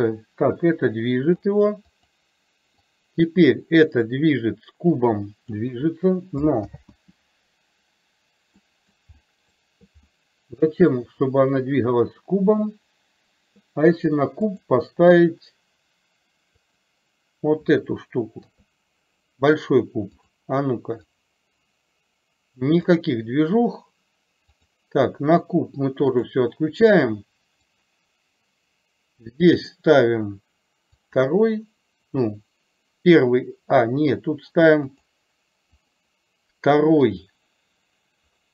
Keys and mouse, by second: 2.0 click, 3.0-5.6 drag, 6.7 ctrl+z, 8.7 middle click, 9.2 middle click, 10.2-10.8 middle drag, 18.5 KP_3, 20.3 click, 21.2-23.0 drag, 26.2 click, 27.7 click, 36.0 click.